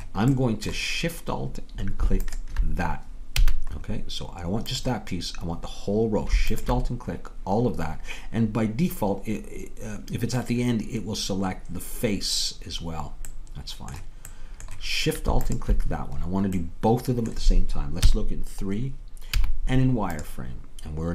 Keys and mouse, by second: 2.8-8.5 drag, 3.5 a, 13.3 middle click, 18.0 KP_3, 19.4 z.